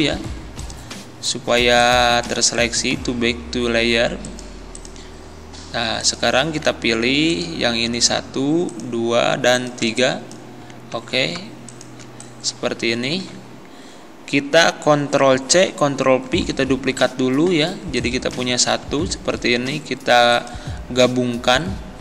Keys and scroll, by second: 10.9 ctrl+z, 13.2 ctrl+z, 15.5 ctrl+c, 18.9 ctrl+z.